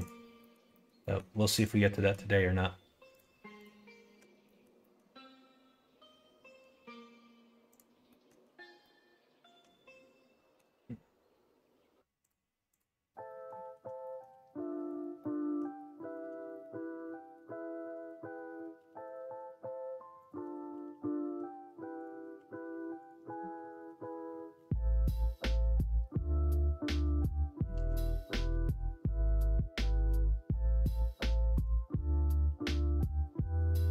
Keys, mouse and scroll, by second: 0.3 middle click, 0.7 middle click, 1.0 middle click, 1.6 click, 1.9 middle click, 3.1 click, 3.5 click, 4.1 Tab, 4.4 middle click, 4.7 middle click, 7.6 click, 8.0 middle click, 8.7-10.5 middle drag, 12.2 click, 12.7 click, 13.2 middle click, 14.0 shift+middle click, 14.8 click, 15.1 middle click, 15.9 middle click, 16.4 shift+middle click, 17.0 middle click, 18.0 click, 18.7 3, 19.0 click, 20.2 shift+click, 20.6 x, 21.3 x, 22.3 2, 23.0 click, 23.7 shift+click, 24.5 f, 25.3 click, 26.5 shift+click, 27.7 ctrl+z, 28.4 middle click, 31.2 shift+click, 32.6 f, 33.3 middle click, 33.7 ctrl+z.